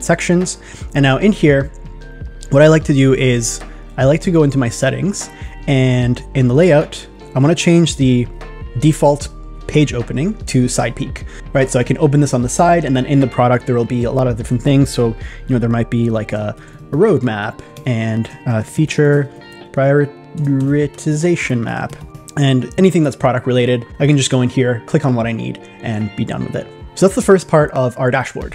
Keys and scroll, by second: 16.7 shift+r, 18.6 shift+f.